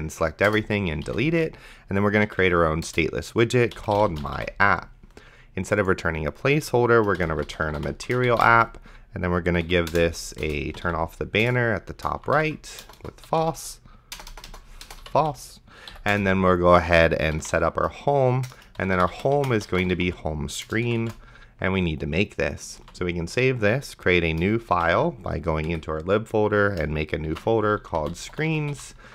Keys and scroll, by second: 0.5 BackSpace, 1.0 s, 1.3 t, 2.3 Down, 2.9 Return, 4.0 y, 4.2 p, 7.1-8.9 typing, 9.7 Right, 10.4 Return, 10.4-15.9 typing, 11.4 Return, 16.1 Return, 17.0-21.8 typing, 18.5 Return, 23.1 ctrl+s, 25.0 ctrl+shift+e, 25.7 Up, 27.5-29.1 typing.